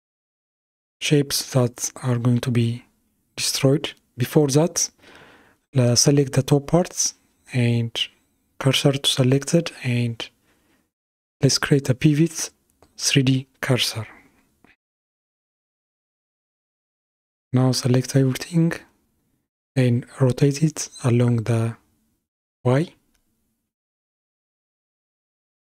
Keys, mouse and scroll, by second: 0.3-1.9 middle drag, 1.9 click, 6.4 shift+s, 11.1-14.1 drag, 15.4 KP_1, 17.3 click, 21.4 r.